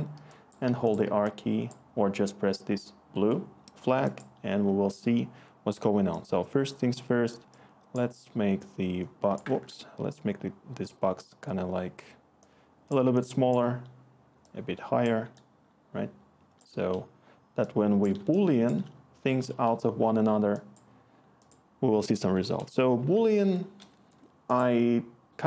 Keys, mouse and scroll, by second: 0.4-1.1 typing, 9.5 ctrl+z, 13.0 click, 13.5 click, 22.6 Tab, 22.8-23.8 typing, 23.9 Return.